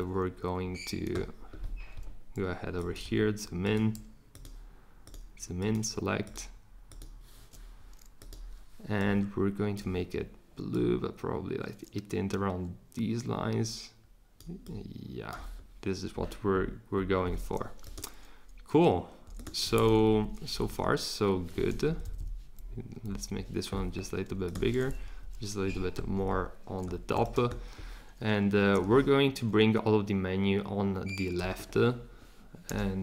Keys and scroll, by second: 20.0 Up, 21.9 Up, 22.0 Up, 22.2 Up, 23.1 Down, 25.0 Up, 32.6 r.